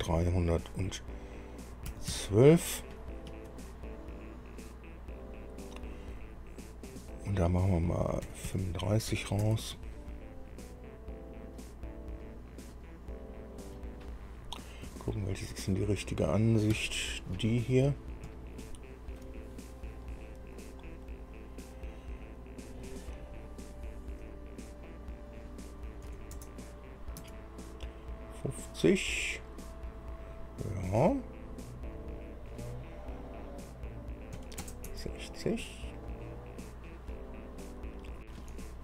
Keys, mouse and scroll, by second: 0.2 KP_3, 2.1 KP_1, 2.3 KP_2, 3.5 Tab, 7.1 click, 8.5 KP_3, 8.7 KP_5, 9.7 Tab, 11.5 scroll up 1, 12.1 scroll down 1, 12.5-14.1 middle drag, 15.1 KP_1, 16.9 KP_4, 18.6-19.6 shift+middle drag, 25.1 click, 26.3 KP_5, 26.6 KP_0, 27.4 Tab, 32.2 click, 34.6 KP_6, 34.8 KP_0, 35.1 Tab, 37.1-37.7 scroll up 2, 38.3 scroll down 2.